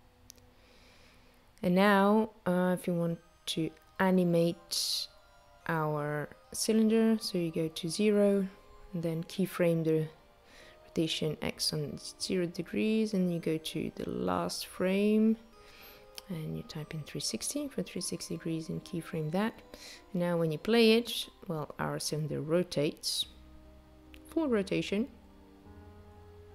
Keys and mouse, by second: 1.4 click, 5.5 click, 7.5 click, 10.7 click, 12.2 click, 15.4 click, 18.4 click, 19.6 space.